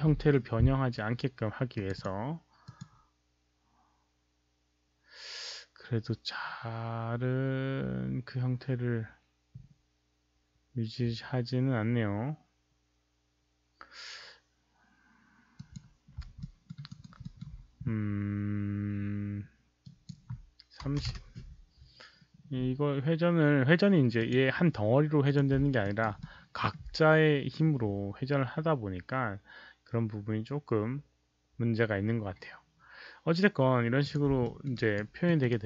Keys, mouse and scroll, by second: 1.4 Return, 1.4 KP_0, 1.4 KP_1, 1.7 click, 1.8 Return, 1.8 KP_0, 1.8 KP_1, 2.6 click, 5.1 KP_1, 7.6 Return, 7.6 click, 7.6 KP_0, 12.5 click, 15.6 click, 16.3 alt+middle drag, 16.8 alt+right click, 17.1 alt+middle click, 19.8 click, 20.8 KP_3, 20.9 KP_0, 21.1 Return, 23.7 Return, 23.7 alt+middle click, 23.7 alt+right click, 23.7 KP_0, 23.7 KP_3, 24.1 click, 24.2 alt+middle click, 24.2 alt+right click, 25.2 click, 25.9 alt+right click, 26.2 alt+middle click, 34.2 click, 34.4 alt+middle click, 34.7 alt+right click, 35.2 alt+middle click, 35.4 alt+right click.